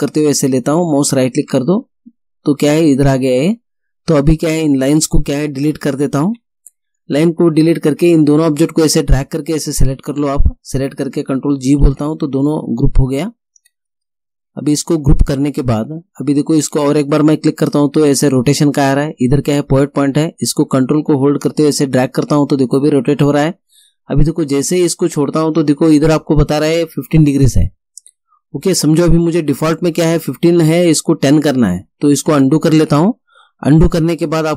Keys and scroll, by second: 5.7 Delete, 11.8 ctrl+g, 32.2 ctrl+z.